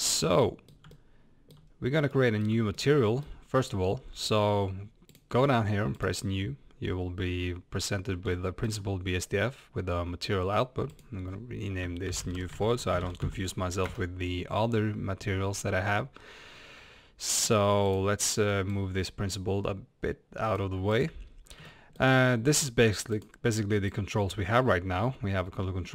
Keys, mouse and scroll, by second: 0.0 scroll up 1, 0.8-2.1 shift+middle drag, 1.7-2.1 scroll up 1, 2.2 middle click, 2.4-5.2 middle drag, 5.2 click, 6.0-13.8 drag, 13.9 Return, 17.8 drag.